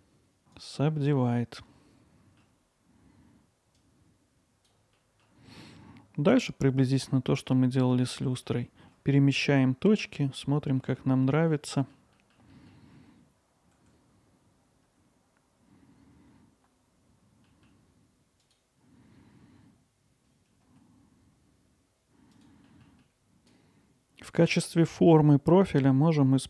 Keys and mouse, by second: 0.0 right click, 1.1-2.4 alt+middle drag, 3.8 click, 5.0 alt+middle drag, 7.0 alt+middle click, 8.1 alt+middle click, 8.5-8.9 ctrl+alt+middle drag, 9.2 alt+middle click, 10.9-11.5 alt+middle drag, 11.7 middle click, 12.2 middle click, 12.9 middle click, 13.9 click, 13.9 alt+middle click, 14.4 click, 14.6 alt+middle click, 14.6 click, 15.0 alt+middle click, 15.2 click, 15.6 middle click, 16.3 click, 16.4 alt+middle click, 16.7 click, 17.0 alt+middle click, 17.5 click, 17.9 middle click, 18.5 click, 18.6 alt+middle click, 19.2 alt+middle click, 19.4 middle click, 19.6 click, 20.3 click, 20.6 middle click, 20.8 click, 21.2 click, 21.4 alt+middle click, 21.9 click, 22.2 middle click, 22.2 g, 22.5 alt+middle click, 22.7 click, 22.9 middle click, 23.5 click.